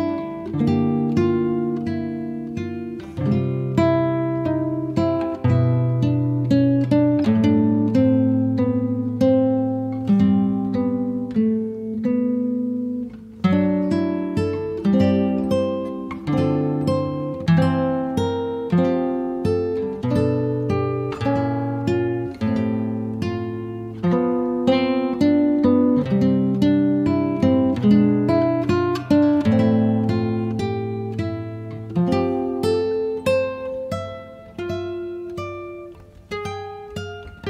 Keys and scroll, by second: 3.8 space, 7.7 t, 10.8-12.1 typing, 12.5 Return, 16.9 Return, 19.0 r, 20.7 space, 23.3 p, 24.6 5, 24.8 8, 25.4 Return, 28.7 e, 35.5 r.